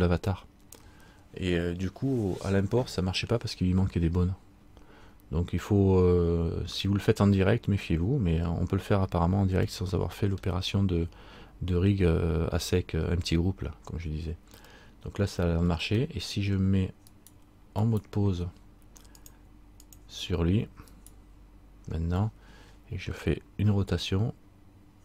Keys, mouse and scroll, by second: 9.9 middle click, 14.9 middle click, 16.2 middle click, 17.3 right click, 19.3 right click, 19.3 click, 21.1 right click, 22.9 middle click, 23.9 r.